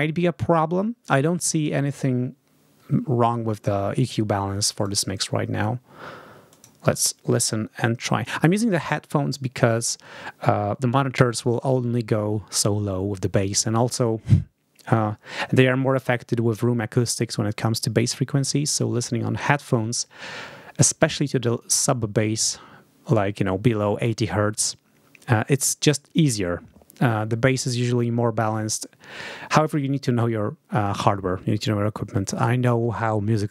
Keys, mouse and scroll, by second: 4.0 click, 6.4 click.